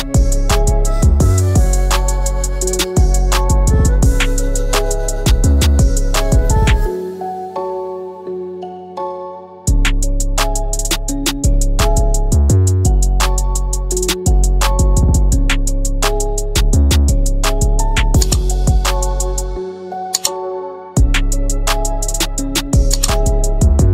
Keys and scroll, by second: 1.3 ctrl+g, 12.5 Left, 12.8 Left, 14.3 Right, 16.3 Left, 22.4 ctrl+g.